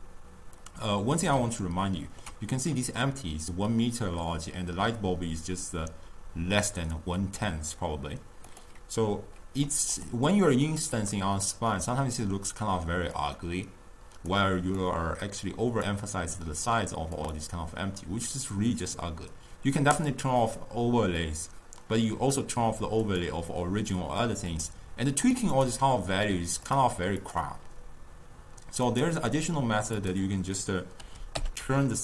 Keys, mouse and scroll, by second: 1.7-4.7 ctrl+middle drag, 8.6-10.2 drag, 10.8 click, 11.8-13.2 middle drag, 13.2 drag, 14.9 click, 15.3 drag, 17.2 click, 20.0 click, 23.1 click, 24.5 click, 25.2 click, 25.6-26.8 drag, 27.2 click, 28.9 click, 30.0-32.0 drag.